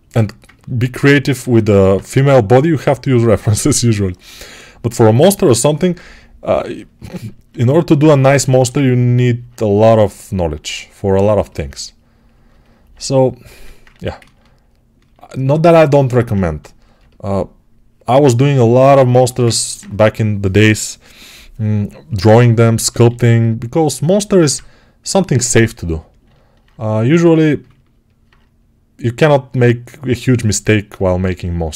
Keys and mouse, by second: 1.2 alt+q, 2.0 g, 4.3-10.5 alt+right drag, 6.9 alt+q, 10.5-15.9 drag, 13.2 1, 14.0 ctrl+1, 22.1 g, 24.3 alt+q.